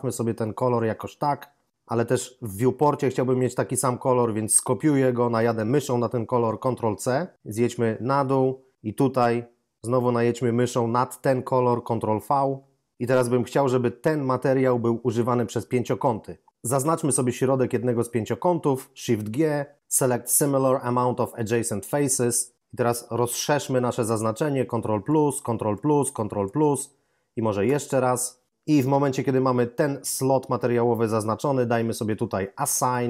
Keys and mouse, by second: 1.0 click, 6.8 ctrl+c, 12.0 ctrl+v, 17.3 right click, 18.8 shift+right click, 19.2 shift+g, 21.6 click, 27.6 ctrl++, 32.7 click.